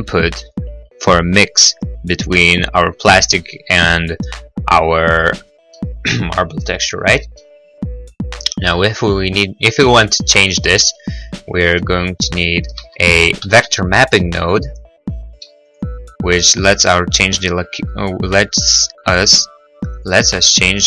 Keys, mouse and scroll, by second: 6.1 middle click, 7.1 middle click, 10.1 scroll, 12.0 middle click, 12.3 middle click, 12.3 scroll, 13.1 shift+a, 13.5 v, 13.6 m, 15.9 click, 18.8 click.